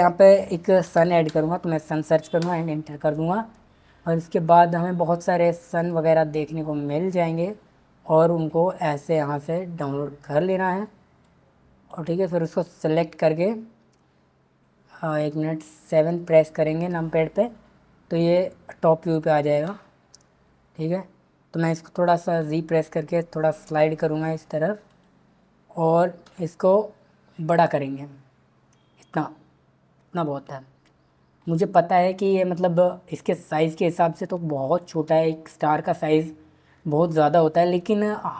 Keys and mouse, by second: 5.9 click, 11.2 click, 15.9 KP_7, 22.4 g, 26.3 s, 31.4 click, 33.6 click.